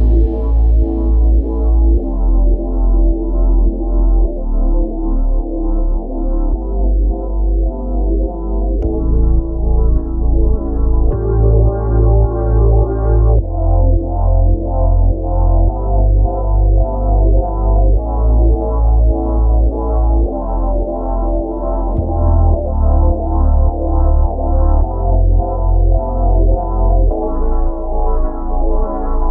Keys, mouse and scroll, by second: 0.3 ctrl+z, 2.8 ctrl+b, 12.9-17.4 drag, 17.4 ctrl+b, 19.4-21.0 drag, 21.0 e, 24.6 Tab, 27.1-29.3 drag.